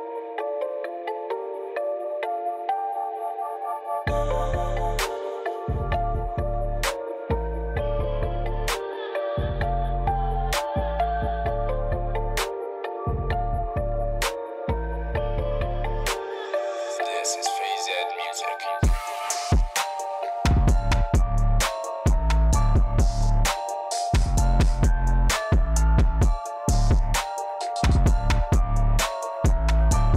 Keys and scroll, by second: 0.0-0.1 typing, 11.8-13.1 typing, 19.0 r, 21.0-22.2 typing, 22.2 Escape, 27.9 e.